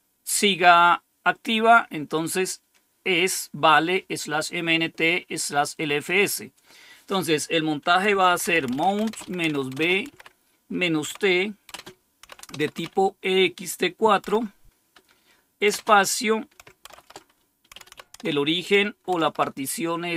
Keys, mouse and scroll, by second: 2.4 click, 6.0 click, 8.0-12.7 typing, 14.2 typing, 15.6 typing, 16.8-19.1 typing.